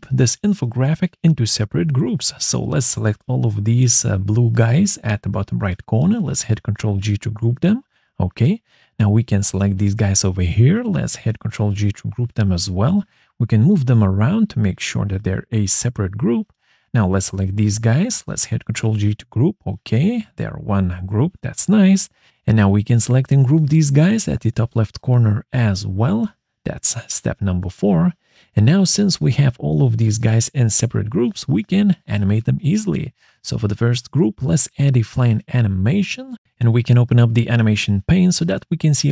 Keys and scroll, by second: 5.1 ctrl+g, 7.3 ctrl+z, 12.4 ctrl+g, 14.2 ctrl+z, 18.7 ctrl+g, 20.9 ctrl+z, 25.5 ctrl+g, 26.8 ctrl+z.